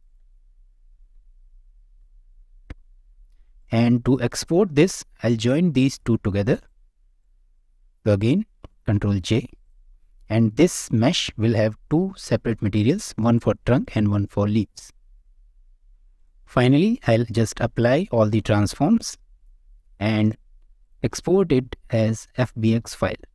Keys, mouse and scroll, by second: 3.5 click, 4.2-4.9 middle drag, 5.4 middle drag, 6.5 click, 7.2 shift+drag, 8.6 ctrl+j, 9.6-9.9 drag, 9.9 middle drag, 10.8 click, 11.3 middle click, 13.8-14.4 drag, 15.2 click, 15.5-15.9 middle drag, 16.1 click, 17.6 ctrl+a, 19.3 click, 20.2 click, 20.8-23.3 drag.